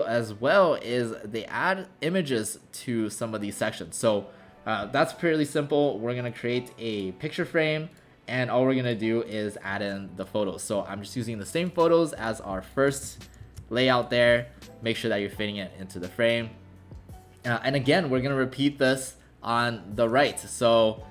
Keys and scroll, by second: 13.4 ctrl+alt+shift+c.